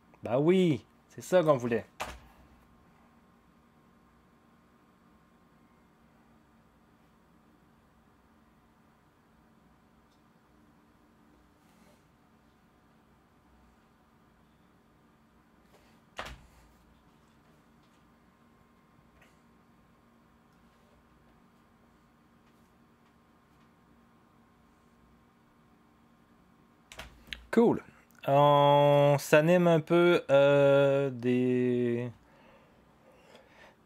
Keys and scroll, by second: 2.0 0, 16.1 0, 26.9 0.